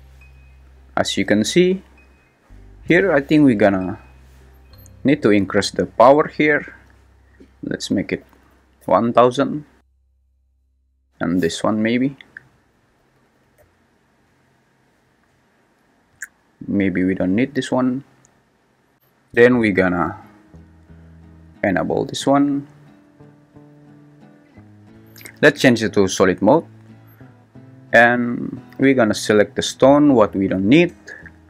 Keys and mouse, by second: 4.9 click, 7.6-8.8 drag, 8.3 0, 8.5 0, 12.6 click, 13.1 0, 16.2 click, 16.7 x, 31.0 x.